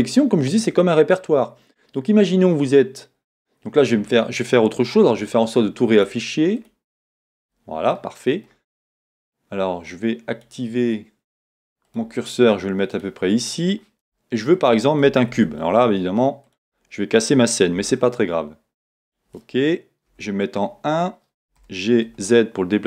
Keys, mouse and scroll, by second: 6.0 click, 10.4 click, 14.1 shift+middle click, 16.6 shift+a, 17.9 s, 19.2 click, 20.1 KP_1, 21.7 g.